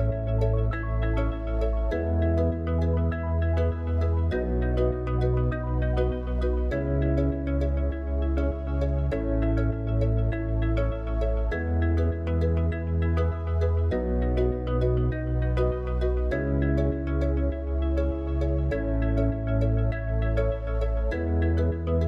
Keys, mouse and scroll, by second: 0.8 click, 4.6 click, 8.6-11.8 middle drag, 11.8 click, 13.2 click, 19.4 KP_0.